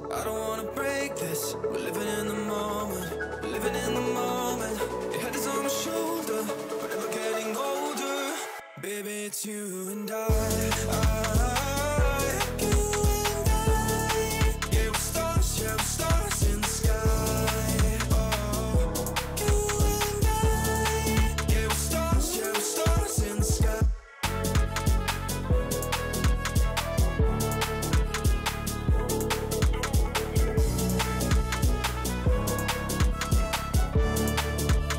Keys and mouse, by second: 3.8 click, 4.7-5.2 drag, 5.8-6.3 drag, 6.7 click, 8.3 click, 8.8 shift+a, 11.1 shift+a, 13.3 click, 13.4 click, 13.6-14.3 drag, 15.1-15.6 drag, 16.1 click, 17.2 click, 18.2-18.9 drag, 19.2 Tab, 19.9 a, 21.1 click, 23.4-25.9 typing, 23.7 click, 27.5 x, 27.6 x, 27.7 x, 27.9 Tab, 28.2 middle click, 28.9 middle click, 30.5 click, 31.8-33.3 drag, 33.3 middle click, 33.9 click, 34.6 click.